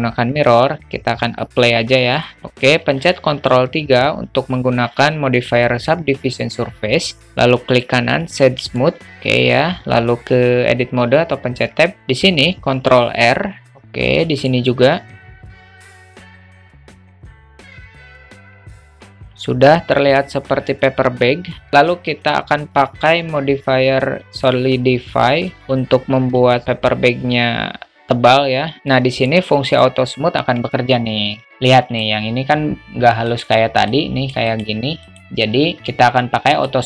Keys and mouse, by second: 1.4-2.2 drag, 2.4 middle click, 3.4 ctrl+3, 8.8 alt+middle click, 9.7 Tab, 12.7 ctrl+r, 14.2 ctrl+r, 16.0 alt+shift+middle click, 16.3 ctrl+r, 16.8 alt+middle click, 17.0 ctrl+r, 17.4 alt+middle click, 17.6 alt+shift+middle click, 17.7 ctrl+r, 18.2 ctrl+r, 18.5 alt+middle click, 18.8 alt+shift+middle click, 19.1 Tab, 19.1-20.6 alt+middle drag, 21.2-21.6 alt+middle drag, 22.8-24.7 drag, 25.6 alt+middle click, 28.8 alt+middle click, 29.3-29.8 alt+middle drag, 30.8-32.1 alt+middle drag, 33.3 click, 33.9 click, 34.6 click, 35.1 click, 35.8 q.